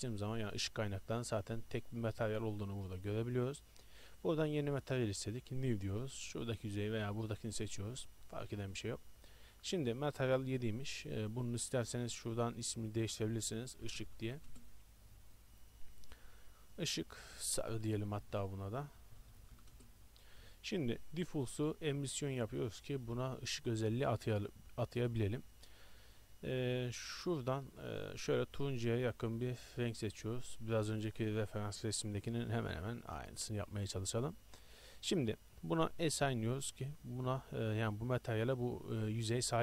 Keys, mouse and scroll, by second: 3.2-5.4 drag, 6.4 middle click, 7.3-8.8 drag, 11.7-14.5 drag, 14.5-17.4 middle drag, 19.8 BackSpace, 36.3-38.0 drag.